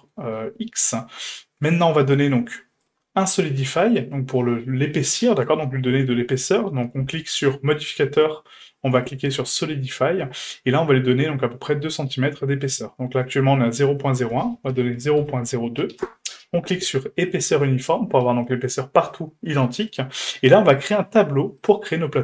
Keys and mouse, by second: 0.4-0.8 shift+middle drag, 1.1 shift+middle drag, 1.7 middle drag, 3.6-9.7 drag, 9.7-10.2 middle drag, 10.8-11.2 shift+middle drag, 11.9-12.3 shift+middle drag, 14.1-16.5 drag, 17.2 click, 20.9-21.7 drag.